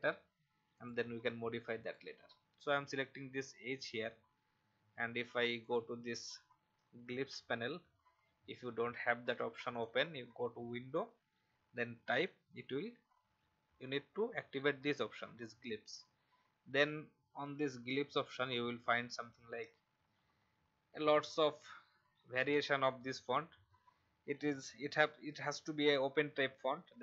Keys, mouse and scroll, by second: 17.9-18.4 scroll down 1, 18.4 click, 19.0-20.1 scroll down 2, 20.1 scroll down 1.